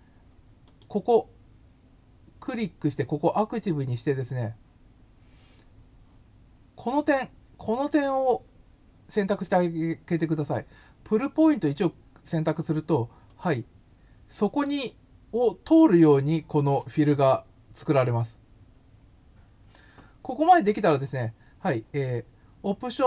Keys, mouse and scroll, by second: 0.6 click, 13.2 click.